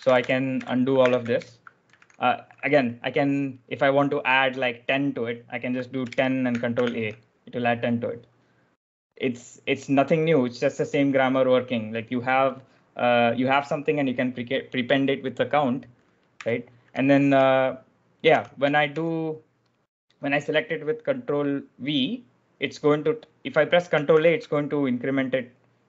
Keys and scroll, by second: 0.0-2.4 typing, 5.9-7.1 typing, 16.2-19.0 typing, 18.2 ctrl+v, 24.0 ctrl+a.